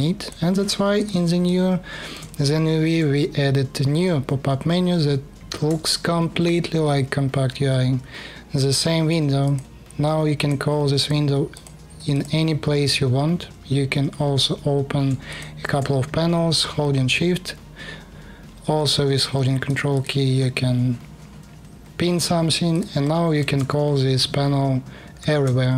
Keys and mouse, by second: 0.6 click, 1.0 alt+click, 2.6-5.4 shift+drag, 5.1 shift+u, 24.9 shift+u.